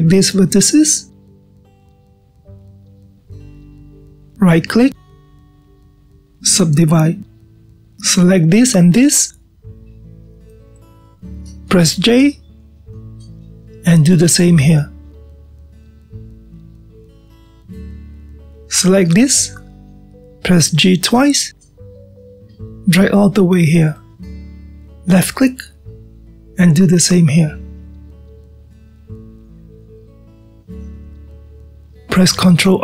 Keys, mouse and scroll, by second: 0.4 click, 2.1 shift+click, 3.2 shift+click, 3.9-5.7 middle drag, 5.7-7.8 right drag, 7.8-9.8 middle drag, 9.8 drag, 11.0 click, 12.1 shift+click, 14.1 j, 15.1 click, 16.2 shift+click, 17.8 j, 20.1 click, 21.9 g, 26.7 click, 29.2 g, 30.9-32.8 middle drag.